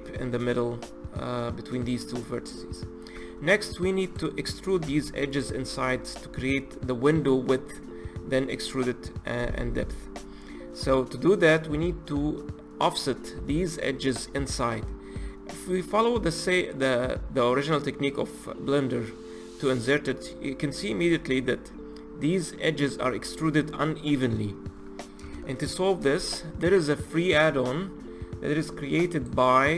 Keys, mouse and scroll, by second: 3.1 Tab, 4.0 click, 4.8 2, 5.3 click, 5.8 click, 16.4 click, 25.3 ctrl+z.